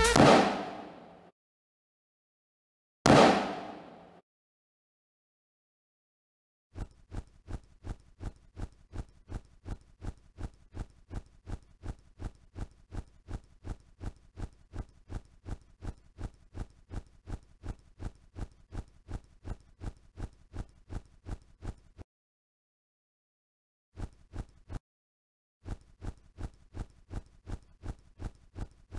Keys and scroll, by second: 0.0 q, 1.3 o, 2.4 c, 2.9 q, 4.2 o, 5.5-8.0 typing, 13.5 c, 15.4 a, 17.1 w, 18.5 m, 19.6 s, 23.0 o, 23.8 space, 25.4 space, 25.9 w, 27.1-27.8 typing.